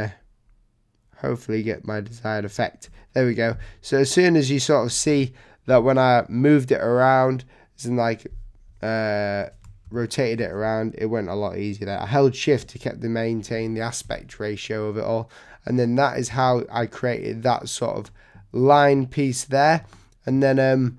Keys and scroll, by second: 4.9 v, 9.8 super+0, 16.3 z, 17.5 v.